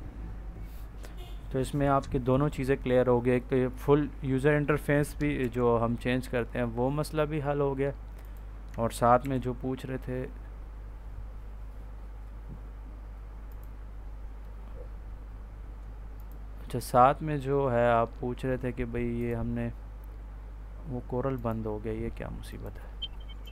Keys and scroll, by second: 5.3 ctrl+n, 9.1 ctrl+n.